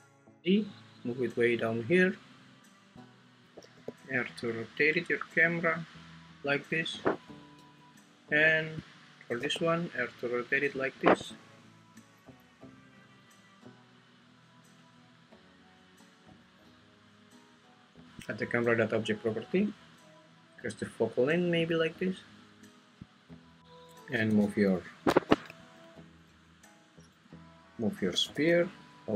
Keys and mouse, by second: 3.7 r, 9.4 r, 10.8 click, 18.2 click, 19.7-21.5 drag, 24.1 g, 24.7 y, 25.5 Escape, 25.5 `, 26.3 `, 28.1 g, 28.3 y.